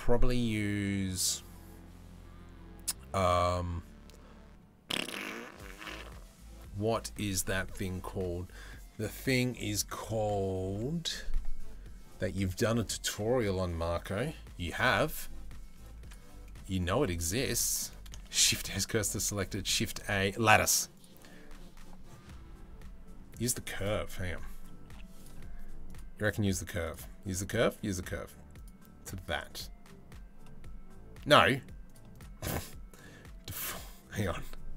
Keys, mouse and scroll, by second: 15.4 click, 17.9 shift+s, 18.9 shift+a, 24.5 Delete, 24.8 click, 25.6-26.6 drag, 27.1 middle click, 28.2 click, 32.0-34.7 drag.